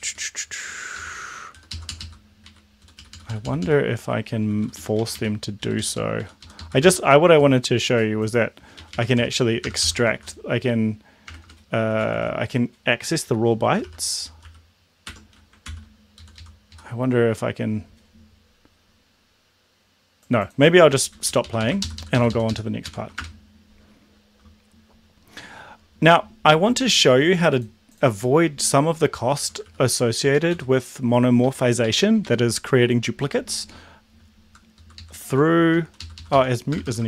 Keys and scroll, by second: 0.0 Up, 1.0 Left, 1.4 Right, 1.6 Down, 1.7 Left, 1.9 Up, 2.0 Left, 2.4 Right, 3.0 Down, 4.6 Down, 4.8 Down, 5.0 Up, 5.1 Up, 5.7 Down, 5.8 Down, 6.2 Down, 6.6 Down, 8.8 Right, 9.0 Right, 9.2-15.0 typing, 15.1 Tab, 15.6 ctrl+s, 16.2 Left, 16.4 Left, 16.7 Left, 21.3 Right, 21.5 Right, 21.6 Right, 21.8 ctrl+shift+Left, 22.9 ctrl+shift+Right, 23.1 BackSpace, 29.7 Down, 30.3 Down, 30.5 End, 31.4 Up, 31.8 Right, 32.0 Right, 32.2 Right, 34.5 Left, 34.9 Left, 35.0 Left, 35.8 shift+Right, 36.0 Left, 36.2 Left, 36.3 Left, 36.7-37.0 typing.